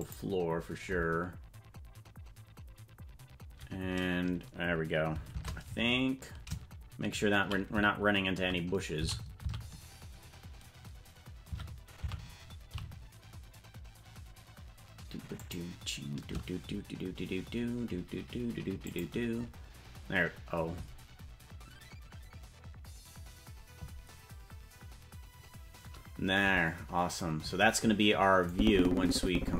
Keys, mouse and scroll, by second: 2.1 click, 5.3 shift+`, 19.1 click, 28.5-29.5 drag.